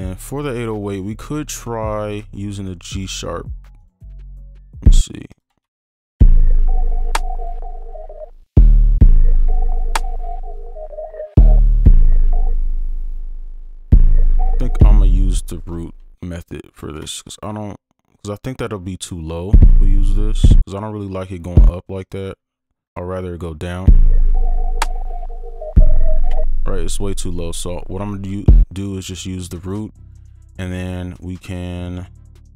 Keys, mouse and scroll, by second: 3.8 right click, 5.4 ctrl+click, 9.1 right click, 11.4 double click, 11.7 right click, 11.8 space, 13.9 space, 14.8 space, 15.7 space, 16.1 right click, 16.8 ctrl+click, 18.9 right click, 22.1 ctrl+click, 26.3 space, 27.0 right click, 30.0 ctrl+click.